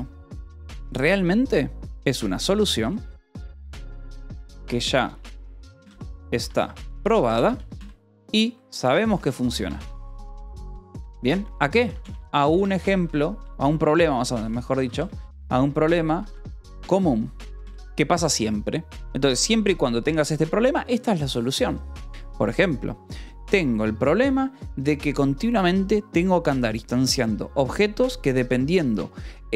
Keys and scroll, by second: 1.5-17.5 typing, 10.8 Escape, 17.7 Escape, 21.9 Escape.